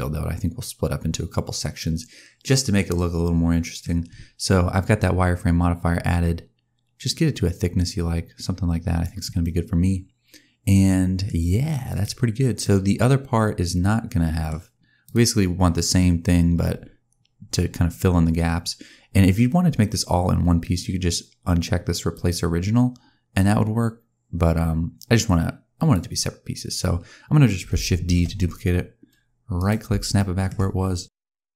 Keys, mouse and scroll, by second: 4.9 click, 9.3 middle click, 11.4-11.8 scroll down 1, 11.8 click, 12.5 middle click, 14.9 click, 15.4-15.8 scroll down 2, 15.8-16.8 scroll up 3, 22.0 click, 25.6 click, 28.0 shift+d, 30.0 shift+middle click.